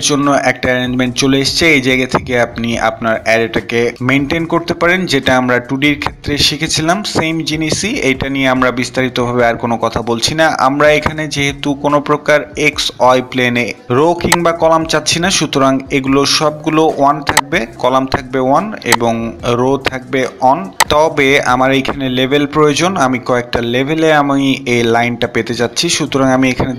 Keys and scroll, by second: 18.6 Return, 18.6 1, 26.4 typing.